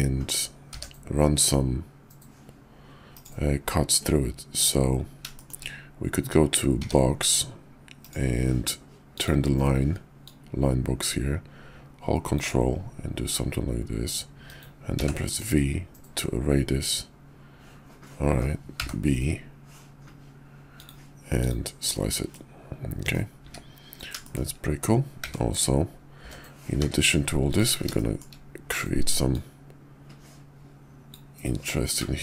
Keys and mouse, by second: 0.7 d, 5.3 shift+drag, 6.7 d, 9.0 click, 10.1-20.9 drag, 22.3-23.1 middle drag, 23.3 `, 24.2 shift+middle drag, 25.2-26.6 typing, 27.9-28.2 shift+middle drag, 29.2-31.1 drag.